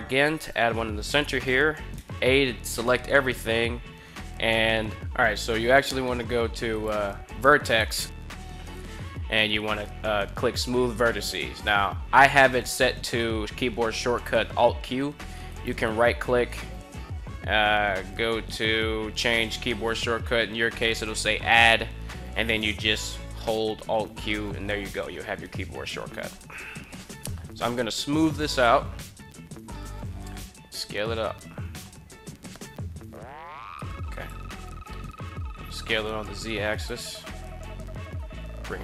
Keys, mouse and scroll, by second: 0.1 right click, 1.8 a, 6.6 click, 7.4-26.2 drag, 28.2 alt+q, 28.6 alt+q, 28.7 alt+q, 29.3 alt+q, 30.3 s, 33.9 click, 34.6 s, 34.8 z, 36.5 click, 37.2 g, 38.0 z.